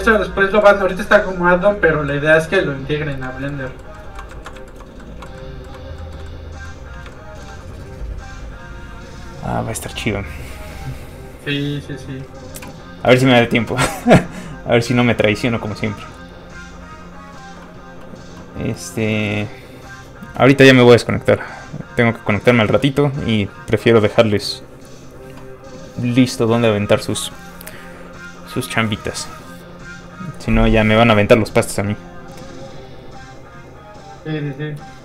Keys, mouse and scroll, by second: 3.4 shift+middle click, 3.7 shift+middle click, 4.3 ctrl+middle click, 5.0 middle click, 5.1 middle click, 5.4 ctrl+middle click, 6.0 ctrl+middle click, 6.2 middle click, 6.3 middle click, 7.1 shift+middle click, 14.6 middle click, 15.6 click.